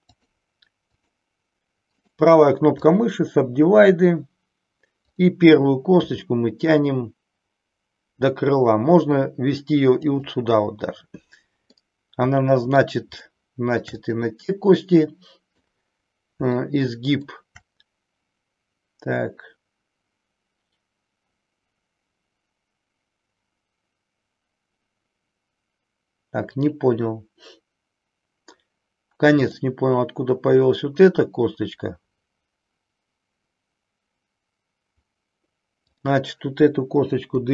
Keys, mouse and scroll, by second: 0.1 click, 1.0 click, 2.0-3.0 right drag, 6.0 g, 10.0 click, 11.8-12.9 middle drag, 13.2 shift+middle click, 14.0-15.6 middle drag, 16.5 shift+middle click, 29.4 click, 35.9 click, 37.3 Delete.